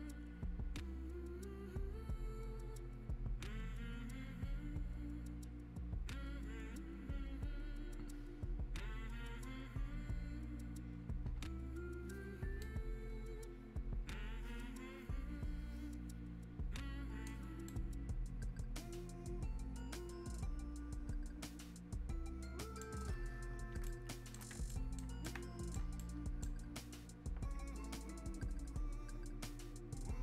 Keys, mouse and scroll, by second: 12.6-30.2 right drag.